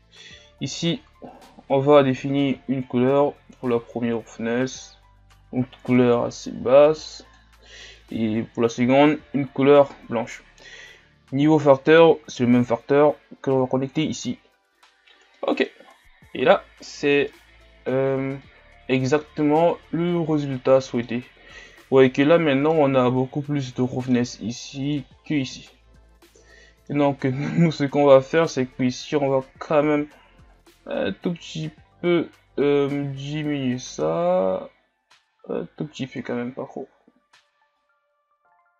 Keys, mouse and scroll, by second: 9.0 click, 11.9-14.0 drag, 15.5 middle click, 15.9-16.6 scroll up 2, 16.6-17.4 scroll down 1, 17.4-19.5 middle drag, 19.5-20.2 scroll up 2, 20.2-30.6 middle drag, 30.6 click, 37.1-37.9 scroll down 2, 37.9-38.7 middle drag.